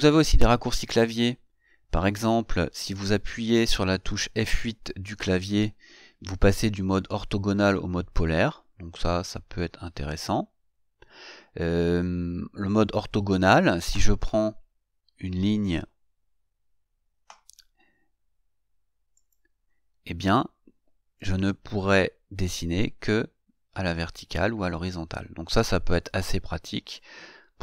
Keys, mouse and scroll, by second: 5.3 F8, 8.7 F8, 13.1 F8, 19.4 click, 26.5 click.